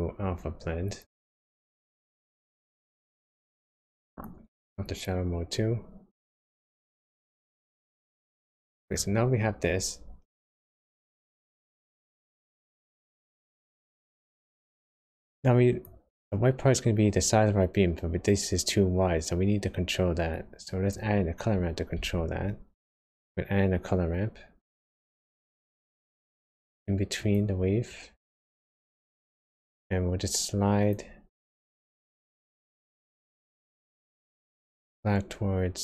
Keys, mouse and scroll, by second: 4.1 click, 6.2 click, 7.1 middle click, 12.6-12.9 scroll up 3, 14.4 click, 15.3 click, 20.3 click, 21.9 shift+a, 28.5 click, 29.6 click, 31.5 click, 32.8 click, 34.8 click.